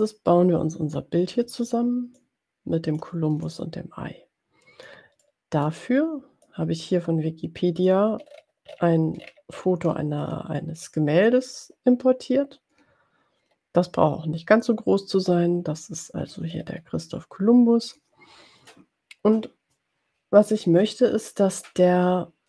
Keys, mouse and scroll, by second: 0.0-1.7 drag, 2.6 ctrl+click, 3.6-5.2 drag, 5.6 middle click, 6.8-8.2 drag, 8.3-9.1 ctrl+scroll up 2, 9.8 ctrl+scroll up 2, 11.0 click, 14.0 scroll up 2, 17.0-17.3 ctrl+scroll up 2, 22.3 ctrl+scroll down 2.